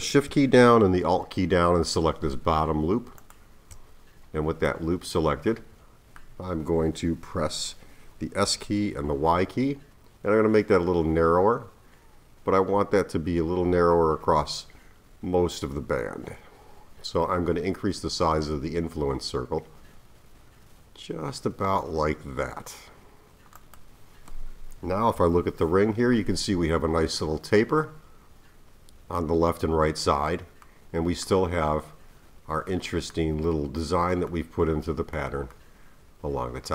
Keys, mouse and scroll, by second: 3.2 alt+shift+click, 4.1-4.7 scroll down 2, 4.7-7.7 middle drag, 8.5 s, 25.1 KP_3, 30.7-31.8 middle drag, 31.8-32.7 scroll down 1, 32.7-36.7 middle drag.